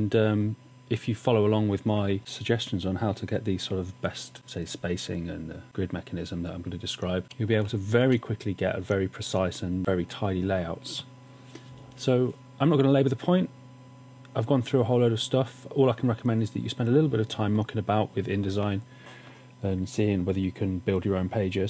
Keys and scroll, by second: 7.4 space.